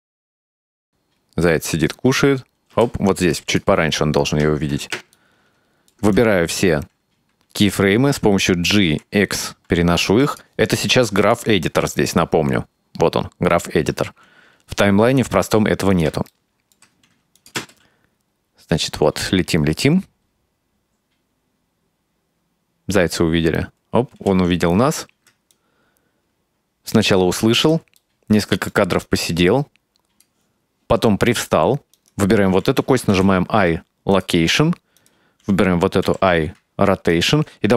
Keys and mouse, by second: 2.8 space, 3.4-3.7 drag, 5.2 middle click, 6.2-6.6 right drag, 8.9 g, 14.0 click, 15.1 g, 16.4 middle click, 17.4 click, 17.6 space, 24.2 space, 25.6-27.8 drag, 28.1 ctrl+middle click, 29.1-30.4 drag, 32.0 right click, 33.2 i, 35.0 right click, 36.1 i.